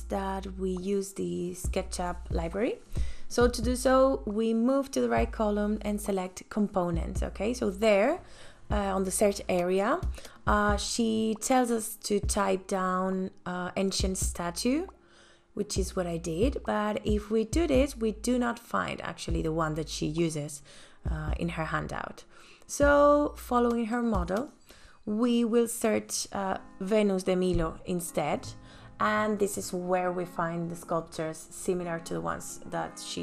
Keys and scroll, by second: 12.3-14.7 typing, 14.8 Return, 22.7-24.5 typing, 25.1 Return.